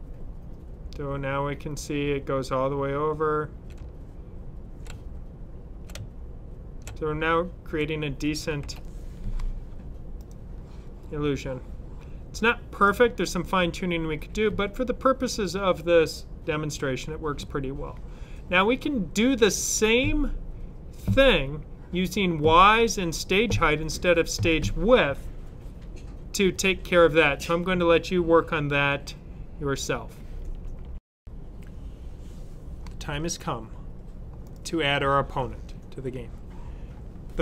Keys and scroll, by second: 3.7 Left, 4.8 Right, 5.8 Left, 6.8 Right, 8.5 super+w, 8.5 typing.